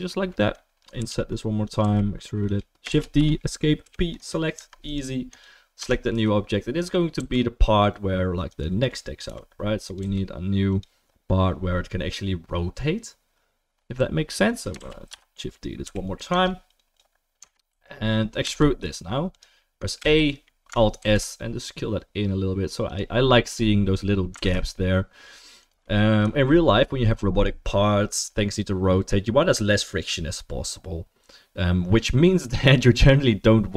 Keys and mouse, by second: 1.0 i, 1.8 e, 2.9 shift+d, 3.8 p, 4.5 Tab, 4.8 click, 5.3 click, 5.8 Tab, 6.1-16.3 middle drag, 6.1 a, 7.2 e, 9.2 i, 10.0 e, 14.8 shift+d, 15.8 p, 16.3 Tab, 16.7 click, 17.4 Tab, 17.7 a, 18.4 e, 20.0 a, 21.0 alt+s, 21.6-33.7 middle drag, 24.3 alt+s.